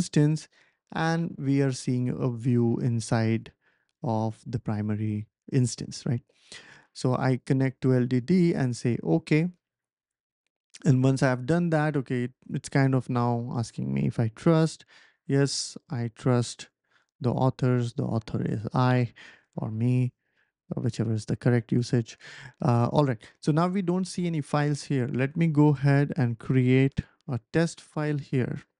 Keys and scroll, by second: 26.6-27.7 typing.